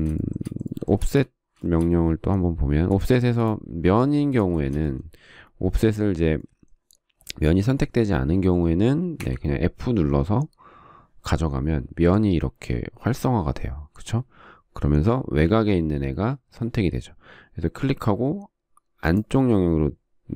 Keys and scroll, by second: 1.7 space, 9.9 f.